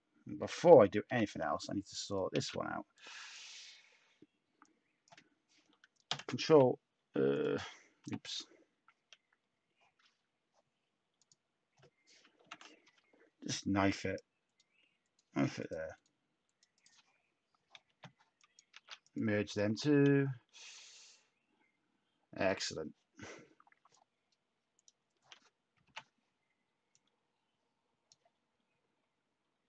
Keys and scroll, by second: 1.0 /, 2.3 a, 6.0 ctrl+l, 7.9 /, 12.4 ctrl+k, 18.7 z, 19.5 Tab, 22.3 Tab, 25.8 /.